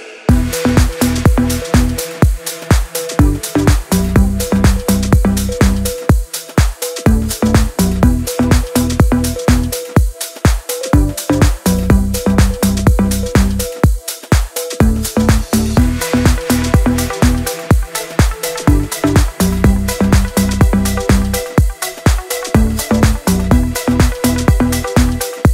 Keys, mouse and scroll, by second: 1.0 scroll down 1, 1.3 t, 2.3 click, 5.9 ctrl+c, 6.5 click, 7.3 ctrl+v, 8.3 ctrl+a, 10.3 ctrl+t, 11.3-13.7 drag, 16.5-18.5 alt+drag.